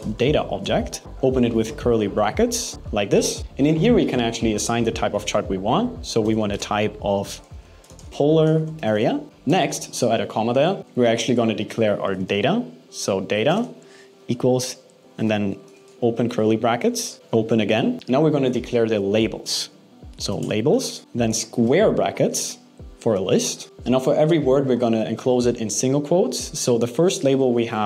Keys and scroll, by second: 0.7 shift+', 0.9 shift+space, 1.0 alt+8, 6.3 shift+space, 9.2 BackSpace, 13.2 shift+space, 14.4 alt+7, 14.8 BackSpace, 14.9 alt+6, 15.4 BackSpace, 15.5 alt+8, 21.0 alt+6, 21.2 BackSpace, 21.4 alt+5, 24.3 shift+'.